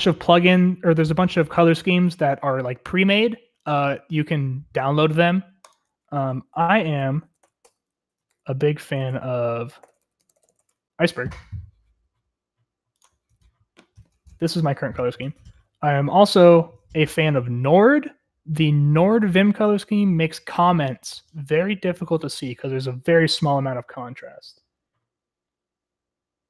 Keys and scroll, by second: 6.1 Escape, 8.3 super+/, 10.2 Return, 10.2-11.7 typing.